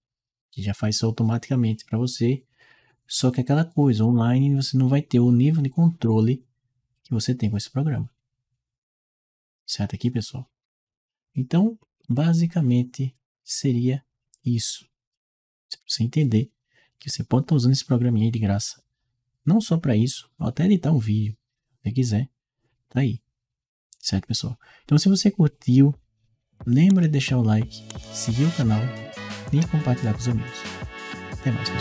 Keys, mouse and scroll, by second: 10.7 Escape.